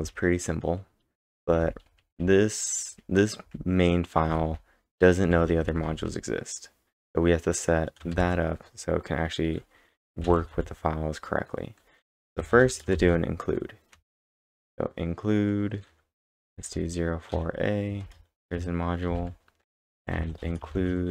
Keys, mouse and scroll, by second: 0.0-6.0 typing, 8.1 shift+o, 12.9 shift+9, 14.4 shift+', 16.2-17.8 typing, 18.0 Return, 19.5-21.1 typing.